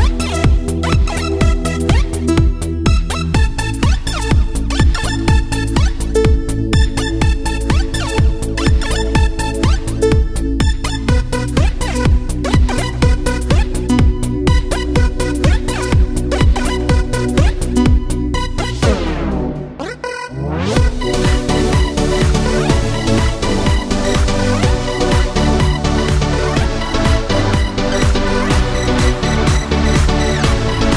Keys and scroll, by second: 0.3 ctrl+c, 0.8 ctrl+v, 12.1 ctrl+c, 12.6 ctrl+v, 24.2 Tab, 28.5 Tab.